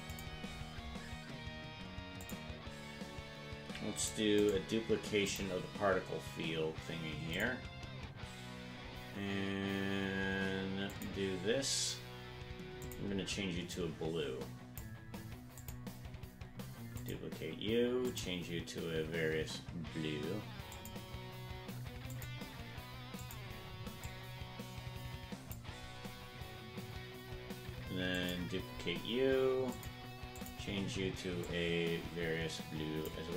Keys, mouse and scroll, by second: 0.0 click, 0.4-1.0 scroll down 4, 2.2 click, 3.9 click, 4.3-5.5 right drag, 7.3 click, 10.9 click, 12.8 click, 15.5 click, 16.9 click, 18.0-20.8 drag, 22.1 click, 23.1 click, 28.1 click, 29.7 click, 30.3 click.